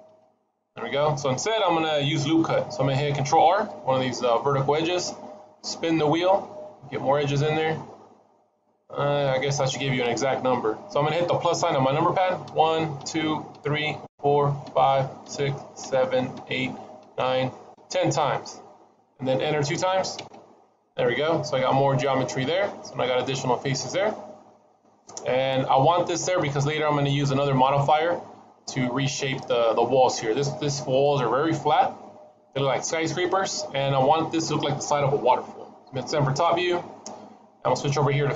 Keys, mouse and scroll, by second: 0.0 ctrl+shift+z, 3.5 ctrl+r, 21.5 middle click, 30.0 middle click, 36.4 KP_7.